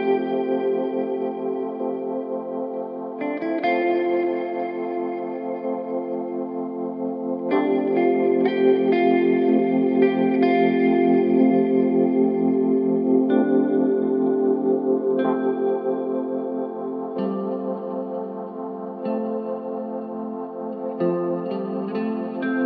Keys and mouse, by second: 22.1-22.6 shift+middle drag.